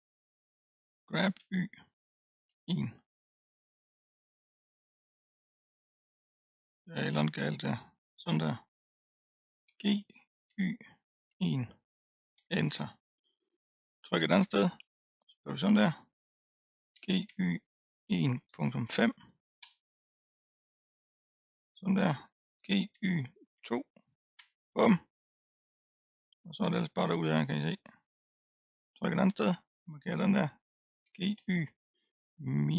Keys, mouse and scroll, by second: 1.0 g, 7.6 ctrl+z, 9.6 g, 13.8 click, 15.3 click, 16.9 g, 20.6-21.4 scroll down 4, 21.4 click, 22.6 g, 25.4-26.6 scroll up 6, 26.6 middle click, 27.2-28.4 scroll down 1, 28.4 click, 28.8 click, 29.5 click, 31.0 g.